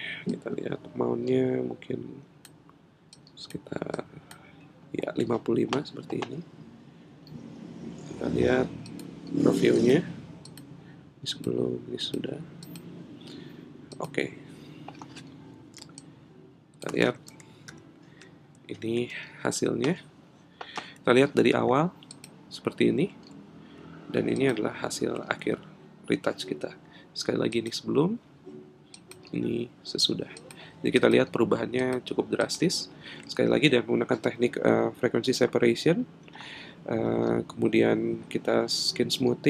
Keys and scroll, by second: 17.7 super+-, 19.1 super+=.